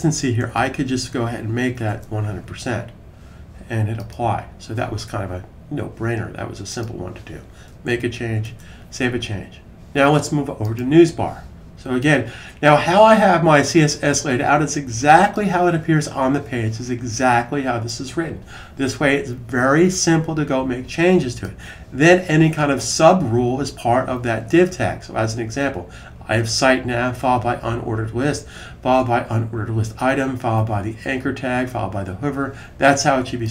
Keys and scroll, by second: 0.0-1.7 typing, 8.3 super+s.